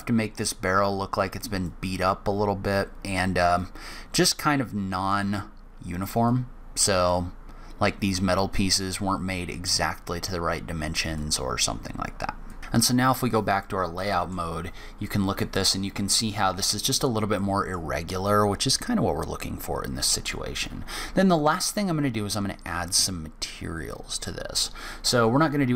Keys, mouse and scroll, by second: 0.4 click, 3.3 click, 4.5 middle click, 5.1-6.0 scroll up 1, 6.0 click, 7.9 click, 10.3 click, 12.3 click, 12.6 middle click, 12.6 click, 12.6-13.4 scroll down 2, 13.4 middle click, 14.6 scroll up 1, 14.8 middle click, 16.5-17.1 scroll down 1, 17.1 middle click, 17.1 scroll down 1, 20.3-21.1 scroll up 1, 21.1 middle click, 25.3-25.6 scroll up 1, 25.6-25.7 scroll down 1.